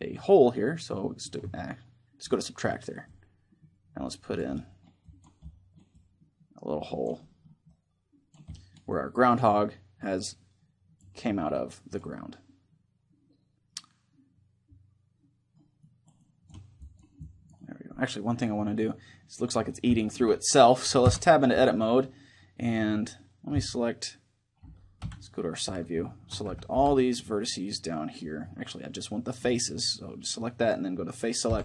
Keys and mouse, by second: 1.0 click, 2.0-13.4 drag, 2.4-10.1 middle drag, 10.8-15.5 middle drag, 15.5-19.4 drag, 17.4 middle click, 20.8 Tab, 24.7 KP_1, 25.8-27.9 middle drag, 26.2 a, 26.4 b, 29.1-30.8 drag, 31.2 Delete.